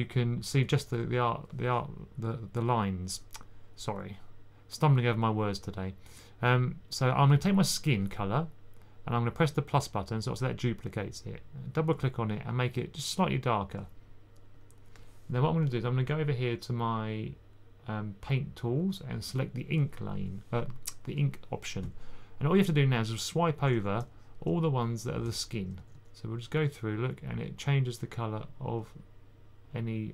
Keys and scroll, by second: 1.3 typing, 23.2-23.9 typing, 25.7 typing, 28.0 typing.